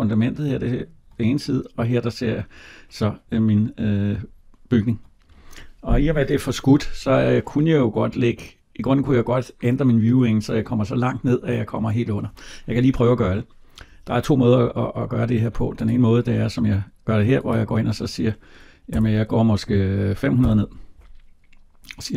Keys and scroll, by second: 18.8 BackSpace.